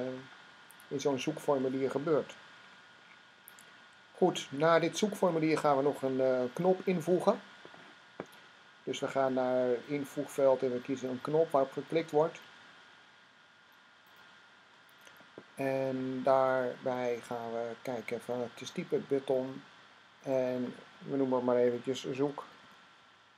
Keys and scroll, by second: 21.3-22.9 typing.